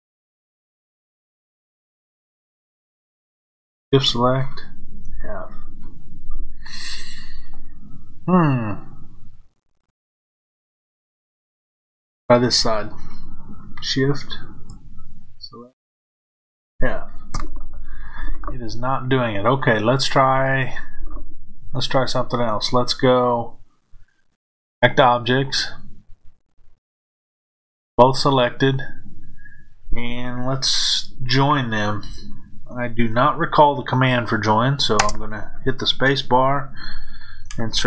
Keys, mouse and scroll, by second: 0.3 click, 3.2 shift+click, 4.8 f, 12.2 click, 15.0 shift+click, 16.5 f, 21.0 scroll down 1, 23.2 click, 25.2-37.8 drag.